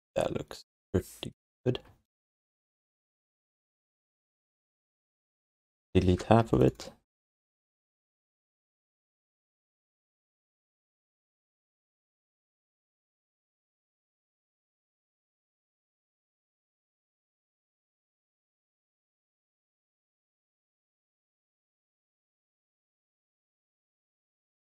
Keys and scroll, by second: 1.6 f, 4.9 q, 7.6 w, 8.6 v, 10.1 r.